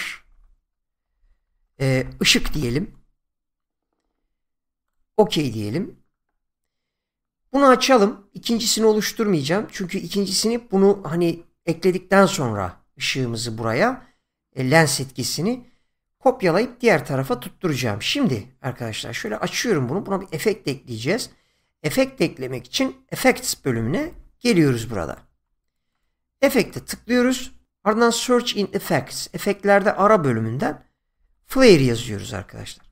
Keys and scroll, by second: 0.2-3.1 typing, 24.1 <, 30.7-32.3 typing.